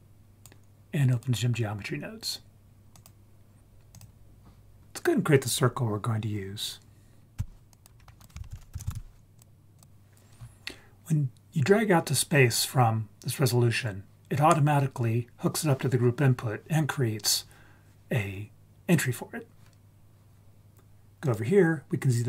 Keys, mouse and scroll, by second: 1.1-3.0 drag, 3.9 click, 4.8 click, 7.4 x, 7.7 click, 8.0 scroll up 4, 8.2 click, 8.4 shift+a, 9.9 click, 21.2 click.